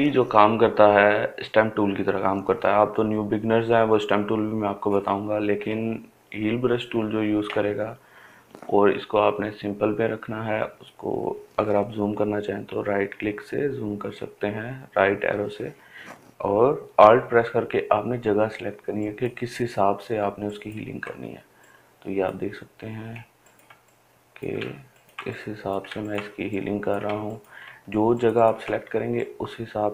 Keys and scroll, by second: 12.3 ], 12.9 ], 13.4 ], 14.4 ].